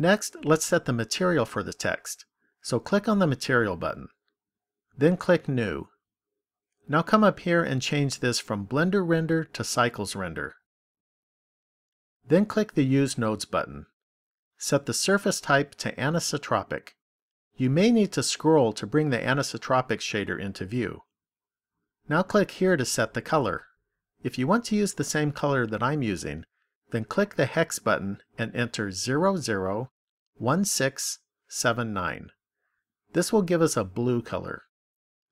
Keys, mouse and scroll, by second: 2.8 click, 5.3 click, 8.7 click, 13.0 click, 15.6 click, 23.0 click, 29.5 0.